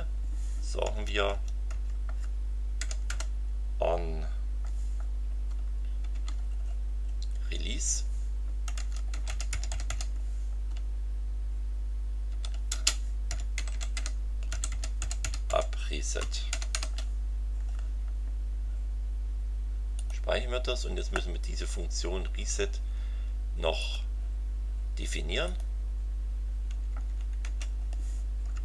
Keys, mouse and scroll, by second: 0.9 Tab, 2.8 o, 3.1 n, 6.1 shift+-, 6.6-7.0 shift+scroll down 3, 8.4-10.4 typing, 12.3-17.2 typing, 20.0 click, 23.8 click, 25.4 click, 26.7 Down, 27.4 Return, 28.5 Tab.